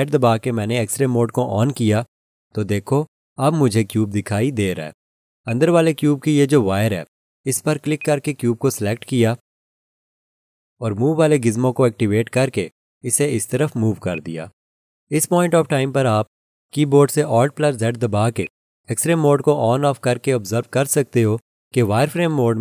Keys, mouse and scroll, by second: 0.2 alt+z, 5.5 alt+click, 8.0 click, 12.3 click, 18.4 click, 19.8 alt+z.